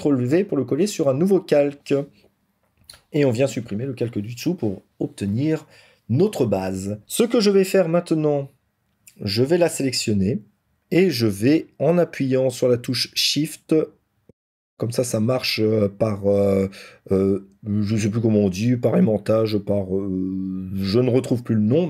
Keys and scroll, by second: 9.5 ctrl+t.